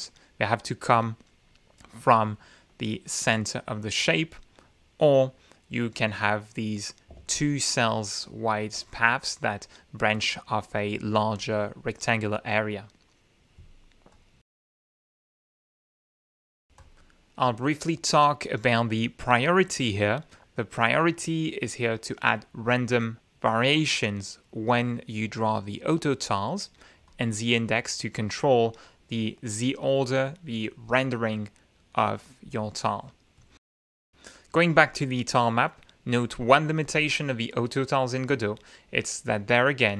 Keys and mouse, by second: 0.7 ctrl+z, 2.8-4.0 drag, 9.9-11.5 ctrl+shift+drag, 14.0-14.8 drag, 16.7 click, 17.4 click, 18.9 click, 27.0 click, 34.0 click, 38.4 click, 38.6 middle click.